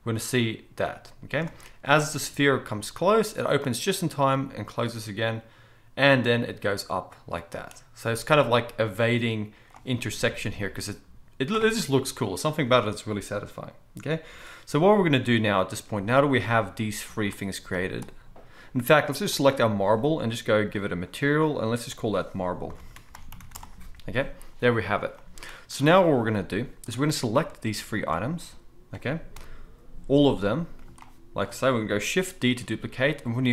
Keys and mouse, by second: 1.4 space, 17.9-19.3 middle drag, 19.3 click, 19.4-20.7 middle drag, 20.7 click, 20.8 middle click, 21.5-33.5 drag, 29.3 KP_7, 32.5 shift+d.